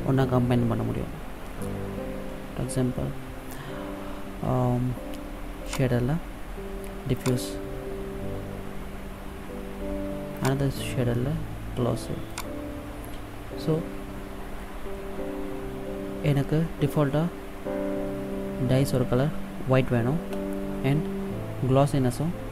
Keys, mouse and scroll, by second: 5.9 click, 10.5 click.